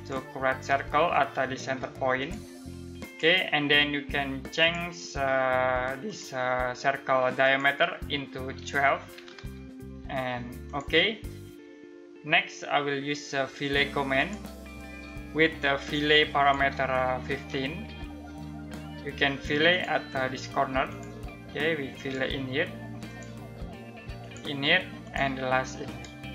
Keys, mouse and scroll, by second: 8.3-9.2 typing, 10.2 click, 13.7 click, 16.9-17.4 typing, 19.3 click.